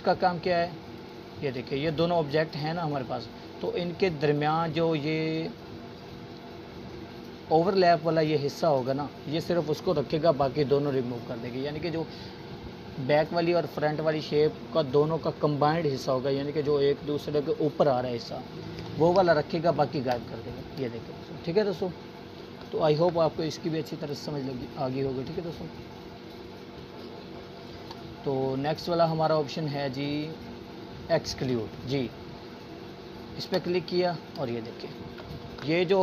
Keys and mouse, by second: 20.9 click, 23.2 ctrl+z, 24.9 click, 29.6-30.2 drag, 34.3 click.